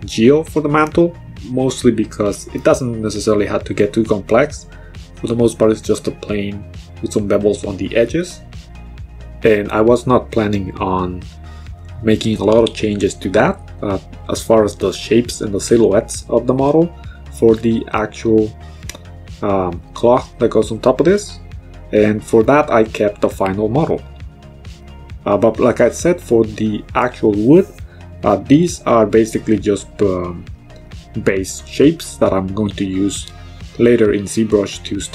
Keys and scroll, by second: 1.2 w, 7.5 w, 20.5 w, 33.8 1.